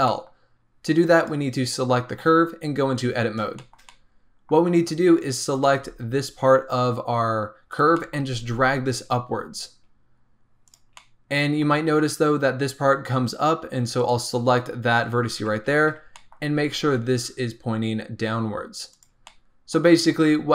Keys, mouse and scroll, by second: 0.0-1.1 middle drag, 1.1 click, 2.8 Tab, 3.1-3.5 scroll up 1, 3.5-5.5 shift+middle drag, 5.5 click, 5.7 g, 7.9 middle click, 8.2 g, 10.9-13.9 middle drag, 13.9 click, 15.3 KP_1, 16.1 shift+middle click, 16.4 scroll up 2, 16.7 g, 19.2 middle click, 19.7-20.1 scroll down 2, 20.1 Tab, 20.4 scroll down 2.